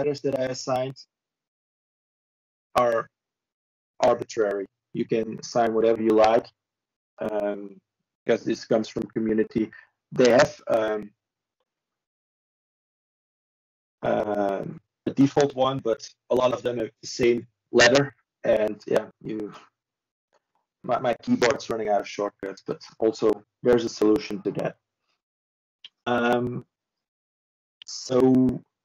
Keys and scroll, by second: 2.4 ctrl+s, 10.2 ctrl+space, 10.8 ctrl+o, 14.6 ctrl+e, 17.6 ctrl+space, 19.2 ctrl+o.